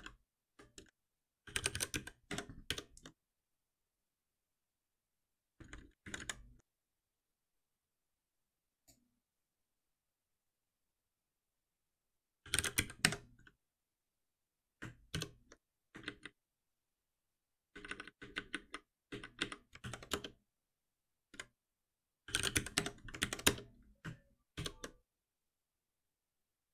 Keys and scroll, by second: 2.7 shift+F10, 5.6 shift+F10, 8.8 ctrl+b, 13.0 Escape, 15.1 shift+F10, 17.7 ctrl+shift+Right, 22.8 Escape, 24.5 alt+Delete, 24.5 shift+F10.